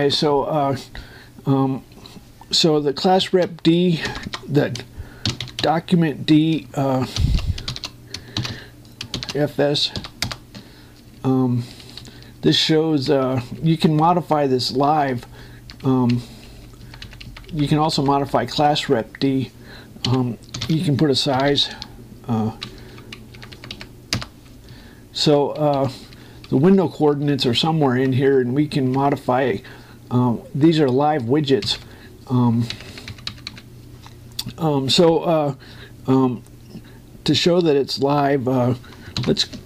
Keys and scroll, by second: 4.0 shift+o, 5.8-6.6 typing, 7.9 shift+d, 8.5 shift+9, 9.1 shift+f, 9.9 shift+0, 11.0 Return, 11.7 Up, 13.2 Right, 14.0 Down, 16.6 Right, 16.9 Down, 17.6 Right, 17.7 Down, 18.0 Right, 23.6 Down, 24.2 Right, 25.5 Up, 28.1 Right, 29.7 Down, 32.4 ctrl+Down.